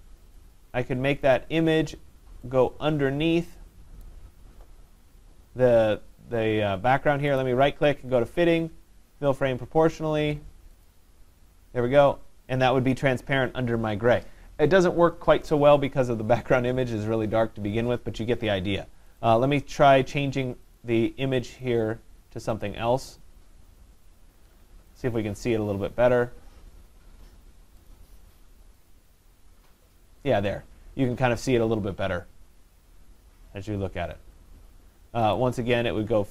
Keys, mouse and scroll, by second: 0.8 click, 1.4 click, 4.0 click, 7.4 right click, 10.9 click, 19.2 right click, 20.8 click, 21.6 click, 22.7 click, 25.0 click, 27.9 click, 28.9 click, 35.4 right click.